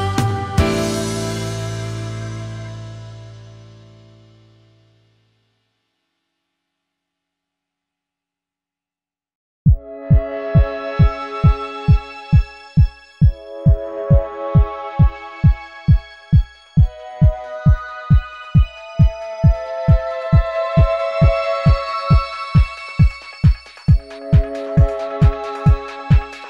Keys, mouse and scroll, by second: 0.0-3.9 typing, 3.5 ctrl+shift+a, 5.5 space, 5.7 ctrl+z, 6.2 space, 8.8 space, 10.1 alt+scroll down 1, 10.6 space, 11.1 space, 16.4 ctrl+shift+a, 16.9 alt+scroll down 1, 17.1 space, 25.4 shift+click.